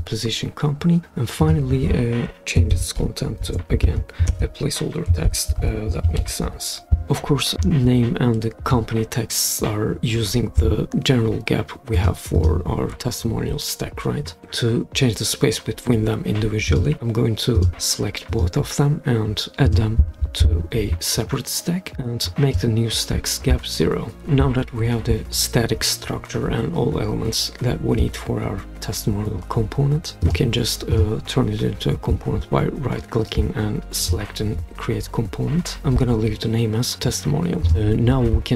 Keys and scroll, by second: 2.5-3.9 typing, 5.0-6.9 typing.